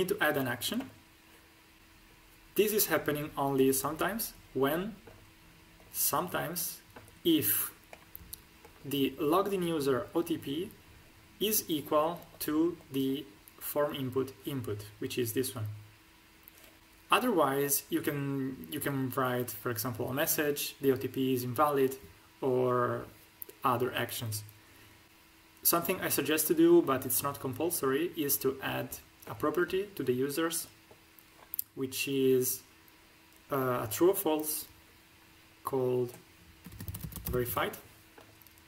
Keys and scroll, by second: 36.6-37.4 typing.